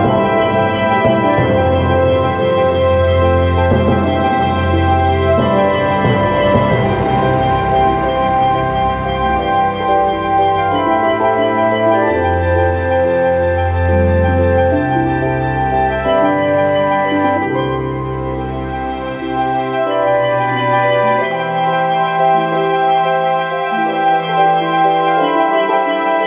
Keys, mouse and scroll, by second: 0.1 click, 4.0 click, 6.8 click, 7.8 click, 8.4 click, 12.4 click, 16.1 click.